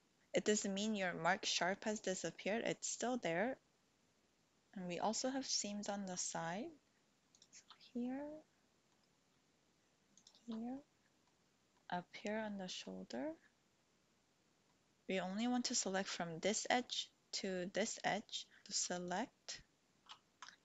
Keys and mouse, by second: 8.0 click, 10.1 alt+shift+click, 10.8 click, 12.3 click, 14.7 click, 20.0 ctrl+z.